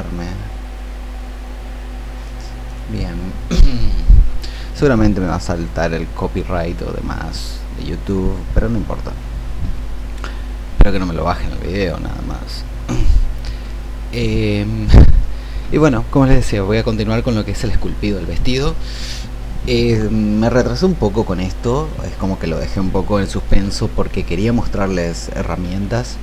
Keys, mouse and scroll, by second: 2.6-26.2 drag.